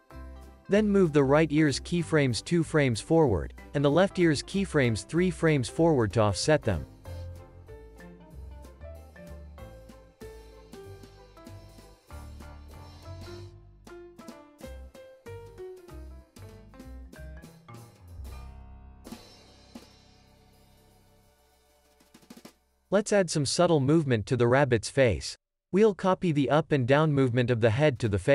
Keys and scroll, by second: 2.2 alt+w, 4.8 alt+w, 5.7 space, 20.6 super+s, 22.9 super+s, 23.5 space.